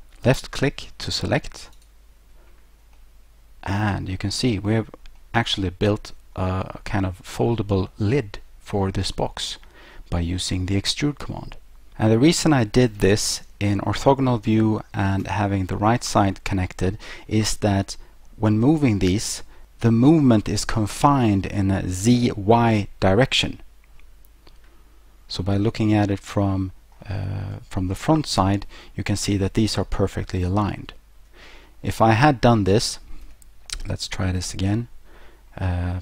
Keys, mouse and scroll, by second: 1.8 click, 3.0 middle click, 4.5-5.2 scroll down 1, 5.2 middle click, 9.5-11.5 scroll up 1, 15.3 3, 16.4-16.8 scroll down 2, 17.0-17.3 scroll up 1, 25.4 middle click, 27.8 1, 32.1 middle click, 32.5 scroll down 1, 33.3 ctrl+z, 34.7 middle click.